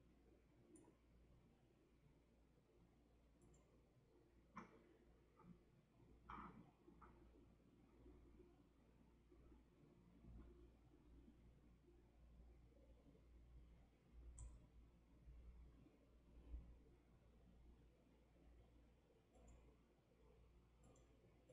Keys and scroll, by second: 1.2-13.1 scroll, 14.3 m, 16.8 w.